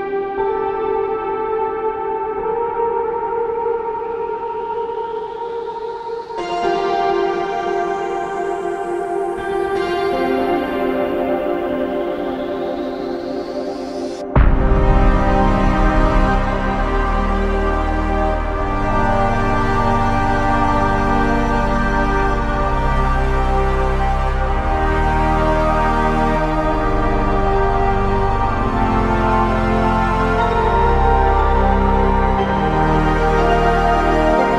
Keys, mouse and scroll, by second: 2.8 alt+click, 18.0 alt+click, 23.5 f, 33.9 alt+shift+click.